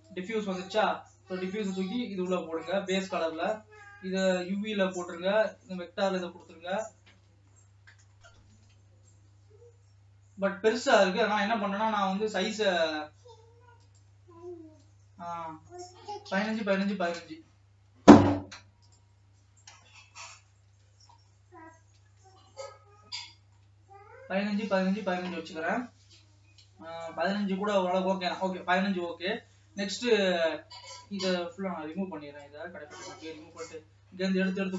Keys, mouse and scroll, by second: 2.8 click, 5.8-7.6 drag, 7.6 middle click, 8.4-8.8 scroll up 2, 8.8 alt+a, 9.9 scroll down 1, 16.6-19.3 drag, 20.4-21.8 middle drag, 21.8 scroll up 3, 22.3 scroll up 2, 22.8-33.0 shift+middle drag, 33.0 Delete.